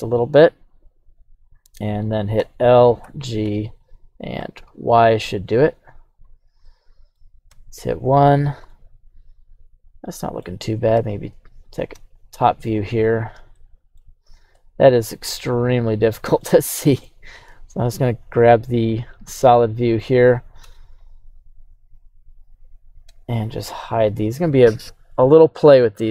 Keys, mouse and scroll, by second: 1.0 click, 2.4 l, 3.0 g, 3.4 x, 4.4 y, 6.1 click, 6.6 middle click, 7.5 KP_1, 8.6 scroll down 1, 8.7-10.5 middle drag, 10.9 KP_7, 11.9 z, 13.0-13.5 scroll up 2, 13.5 shift+middle click, 14.5 g, 14.8 y, 16.2 click, 16.4 middle click, 17.5 z, 18.1 scroll down 1, 18.4-20.0 middle drag, 20.3 scroll down 2, 20.6 Tab, 21.0 right click, 22.0 right click, 23.0 h, 23.9 right click, 24.1 h, 25.6 drag, 25.9 click.